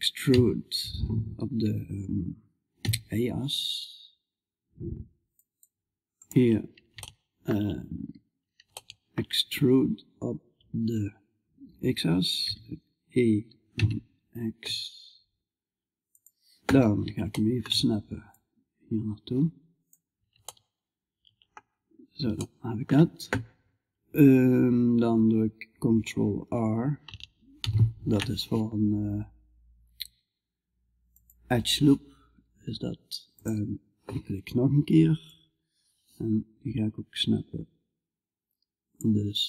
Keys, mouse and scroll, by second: 6.6-8.2 right drag, 8.2-11.8 middle drag, 11.8 e, 16.7-17.8 middle drag, 17.8-19.8 drag, 19.8-27.0 middle drag, 27.0 ctrl+r, 34.7-38.4 drag.